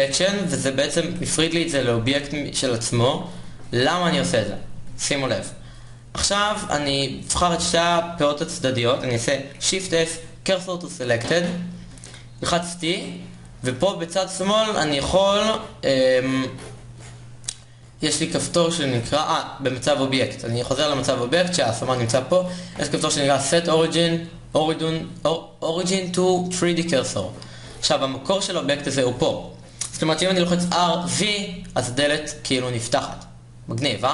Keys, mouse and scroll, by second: 1.8 Tab, 2.5 z, 4.9 click, 5.1 Tab, 6.4 ctrl+Tab, 11.3 shift+s, 14.0 t, 21.2 Tab.